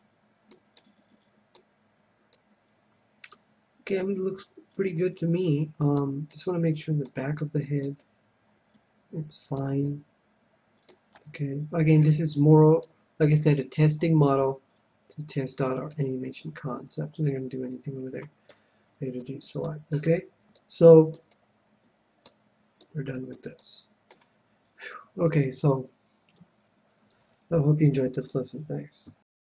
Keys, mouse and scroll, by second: 6.2-9.6 middle drag, 9.7-11.1 middle drag, 11.1 KP_1, 11.8-14.5 middle drag, 13.4 right click, 14.3 g, 14.5 right click, 15.9-17.7 right drag, 18.5 a, 19.1-25.3 middle drag.